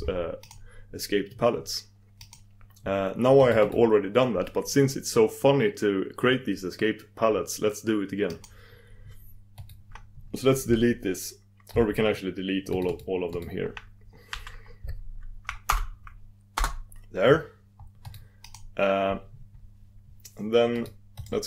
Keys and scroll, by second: 0.7 super+d, 2.3 super+d, 8.7 super+d, 13.1 super+d, 16.7 super+d.